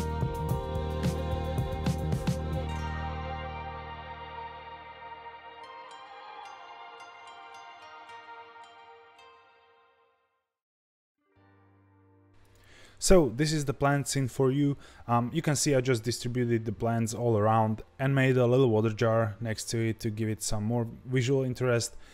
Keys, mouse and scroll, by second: 0.0 alt+h, 0.4-0.7 scroll down 1, 0.7 alt+h, 0.8 r, 1.4 ctrl+s, 1.5 g, 2.0 click, 3.0 ctrl+s, 3.1 g, 3.6 click, 3.7 g, 5.1 ctrl+s, 5.5 click, 5.6 scroll up 1, 5.8 scroll down 1, 6.0-6.6 drag, 9.2 ctrl+s, 9.2 scroll up 2, 9.5 shift+middle click, 9.7 click, 9.8 g, 10.9 f, 10.9 shift+z, 11.1 shift+z, 11.2 g, 11.5 click, 11.6 ctrl+s, 11.8 click.